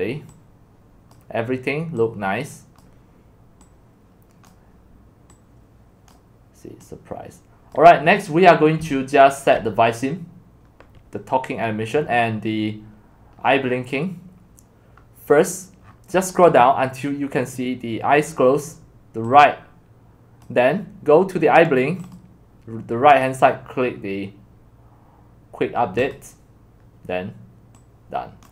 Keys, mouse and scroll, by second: 0.0-4.6 drag, 4.9-8.0 drag, 8.0-8.8 scroll down 8, 8.8-9.5 c, 9.7-13.5 drag, 13.5-14.4 scroll up 6, 14.4-18.1 scroll down 21, 18.1 scroll down 1, 20.4-28.5 drag.